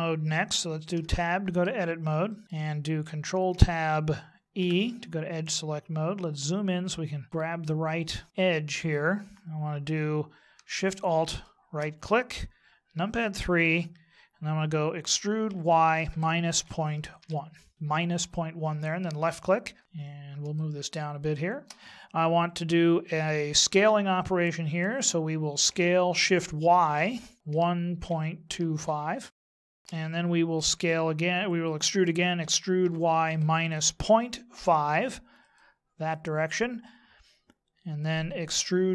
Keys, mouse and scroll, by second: 0.9 Tab, 2.3 middle click, 3.3 ctrl+Tab, 5.4-7.0 scroll up 7, 7.6 middle click, 11.3 alt+shift+right click, 12.9 KP_3, 15.0 e, 20.5 shift+middle click, 25.7 s, 29.7 shift+middle click, 32.4 e, 38.5 e.